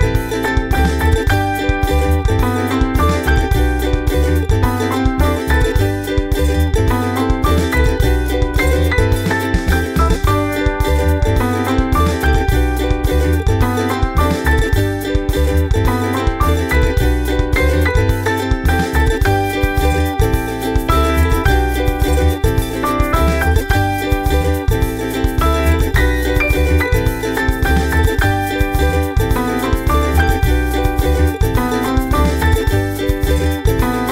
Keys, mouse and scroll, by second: 3.2-3.8 ctrl+scroll up 6, 5.0-5.8 scroll up 6, 6.4 scroll up 2, 7.0-7.9 scroll up 6, 8.6 scroll down 2, 9.4 click, 10.4 ctrl+z, 10.9 click, 11.2-12.4 drag, 13.1 click, 13.4-14.4 typing, 15.0 click, 16.2-16.9 scroll down 4, 17.0-18.0 scroll down 6, 18.5-19.2 scroll down 4, 19.3 click, 20.0 scroll down 4, 20.5 click, 21.0 scroll down 1, 21.5 click, 22.1 scroll down 1, 22.8 scroll up 1, 26.6 click, 27.1 click, 27.4-28.4 typing, 29.2 click.